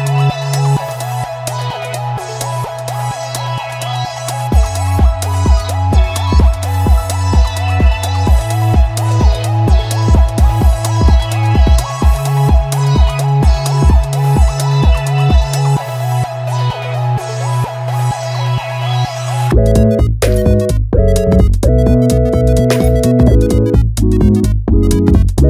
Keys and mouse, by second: 0.2 g, 0.3 middle click, 0.8 click, 0.9 middle click, 1.4 Tab, 1.9 e, 2.3 click, 2.4-3.6 middle drag, 3.6 KP_3, 4.0 middle click, 4.2 Tab, 4.3 click, 4.6 Tab, 4.9 middle click, 4.9 g, 5.7 click, 5.9 middle click, 6.4 KP_1, 7.8-10.1 middle drag, 10.2 middle click, 10.5 Tab, 10.6 Tab, 11.5 click, 11.6 middle click, 12.1 g, 12.5 middle click, 12.9 click, 13.1 KP_3, 13.3 shift+middle click, 13.5 Tab, 13.8 click, 14.1 click, 14.5 ctrl+right click, 15.1 s, 15.3 y, 15.5 KP_0, 15.7 KP_Enter, 16.4 g, 17.8 click, 18.1 click, 18.3-20.4 middle drag, 20.9 Tab, 21.8 shift+d, 22.3 g, 22.4 z, 23.1 drag, 24.5 KP_1, 24.7 alt+z.